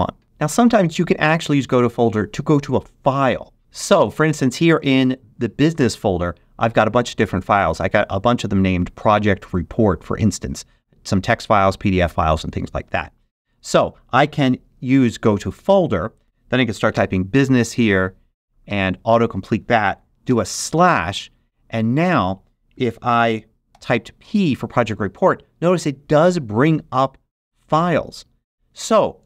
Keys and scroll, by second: 14.9 shift+super+g, 16.2 BackSpace, 16.8 shift+b, 17.4 shift+u, 17.7 s, 18.6 Tab, 20.2 /, 23.6 p.